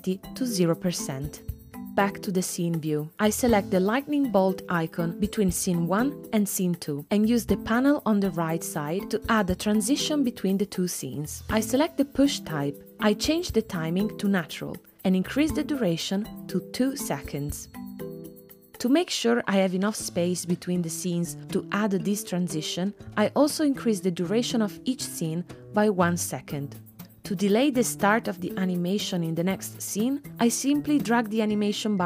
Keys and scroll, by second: 17.8 2, 26.9 space, 27.5 space.